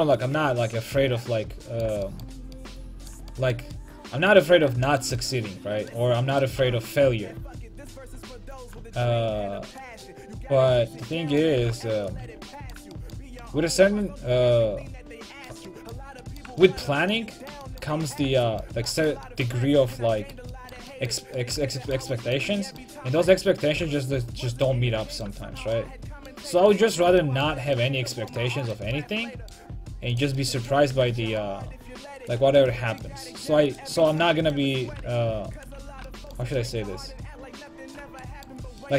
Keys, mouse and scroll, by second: 6.4 right click, 6.8 click, 6.8 g, 11.6 g, 12.3-13.8 drag, 12.3 a, 15.9-18.9 middle drag, 21.3 middle click, 22.2-23.4 middle drag, 23.4-24.7 right drag, 23.8 g, 24.8 a, 25.1 middle click, 28.8 middle click, 30.2-34.2 right drag, 31.0 g, 32.4 a, 33.7 click, 34.9 g, 35.8 a.